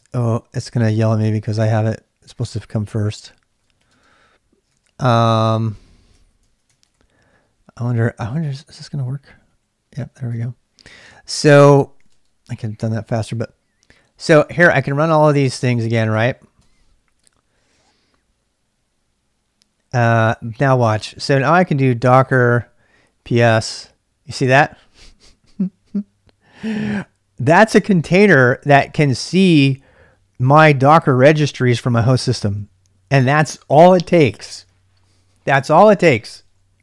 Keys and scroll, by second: 0.0 ctrl+[, 0.1-5.6 typing, 6.1 ctrl+[, 6.7 ctrl+[, 6.9-12.5 typing, 10.3 ctrl+[, 12.7 Return, 14.3 Return, 14.8 Return, 15.3 Return, 16.1 Return, 16.6 Return, 21.1-24.9 typing.